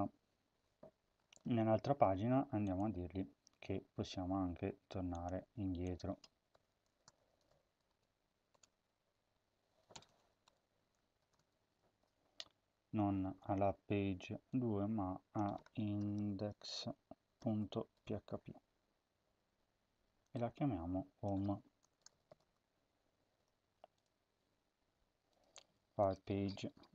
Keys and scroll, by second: 1.6 ctrl+c, 3.3 ctrl+v, 6.4-7.8 typing, 8.4 Return, 8.6 Tab, 9.2 Down, 9.8 Return, 9.9 Return, 10.3-11.0 typing, 11.6 ctrl+s, 15.6-18.4 typing, 21.6-22.6 typing, 23.4 ctrl+s, 26.8 Right.